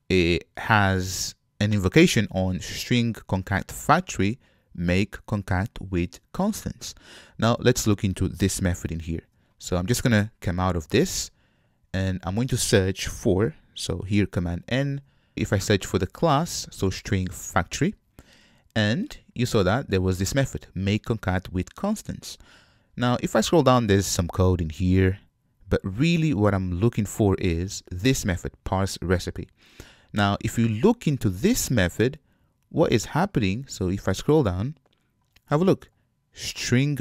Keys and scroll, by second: 8.7 super+c, 10.4 super+c, 15.3 alt+BackSpace, 18.1 super+v, 31.0 super+b.